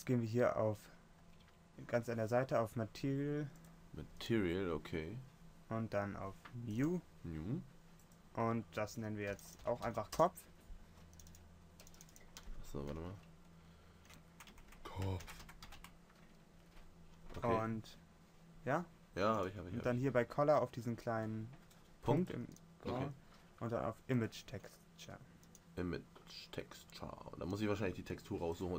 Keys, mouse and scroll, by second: 3.8-5.6 drag, 9.4 click, 22.4-24.0 right drag, 28.7 click.